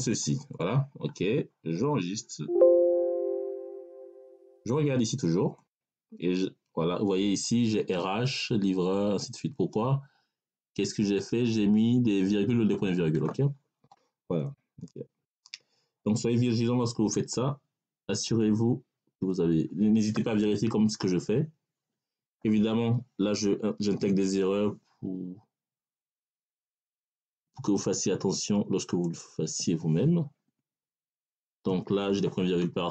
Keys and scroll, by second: 21.1 Left, 22.0 BackSpace, 23.8 ., 30.3 BackSpace, 31.5 ..